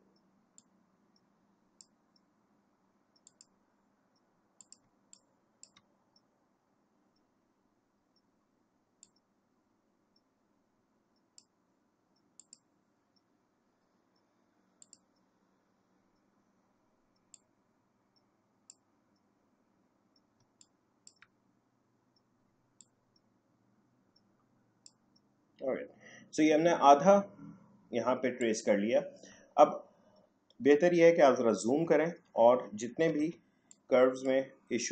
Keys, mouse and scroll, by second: 0.5-3.2 drag, 4.8 space, 5.1 click, 5.3 space, 9.0-12.4 drag, 14.8 click, 17.3-20.4 drag, 20.4 space, 20.6 click, 21.1 space, 22.8-27.4 drag, 28.4 click, 31.0 alt+scroll up 1, 33.1 a, 33.7-34.9 drag.